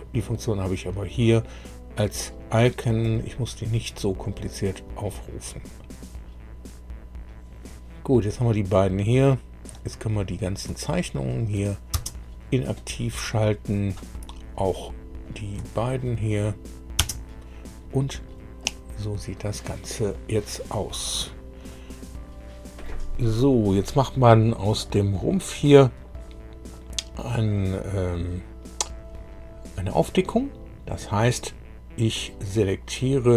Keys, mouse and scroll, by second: 3.0 click, 9.6 click, 10.2 click, 11.2 shift+click, 11.9 shift+space, 14.5 click, 15.2 click, 15.7 shift+click, 16.9 space, 18.6-19.8 middle drag, 21.0-23.0 middle drag, 24.3 middle click.